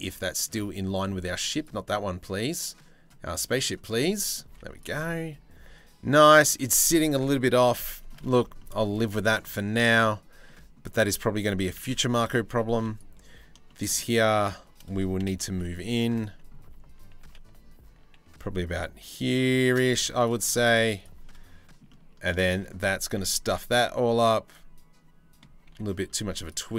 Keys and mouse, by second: 1.9 middle click, 3.3 middle click, 3.6 middle click, 4.1 z, 4.6-7.7 middle drag, 8.2 shift+middle click, 8.7 middle click, 12.4 3, 12.6 click, 13.3 shift+click, 14.8 KP_7, 15.1 z, 16.8 g, 17.0-19.4 shift+middle drag, 19.5 z, 20.4 z, 20.9 middle click, 21.5 middle click, 22.1 middle click, 22.8-25.0 middle drag, 25.3 1, 25.7 2, 26.5 alt+click.